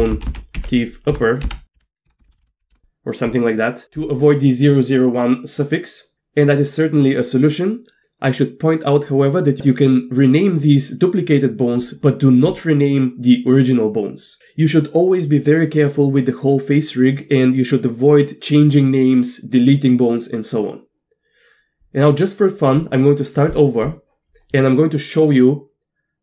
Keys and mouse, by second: 0.1 BackSpace, 0.3 BackSpace, 2.3 p, 12.5 click, 22.7-26.2 drag.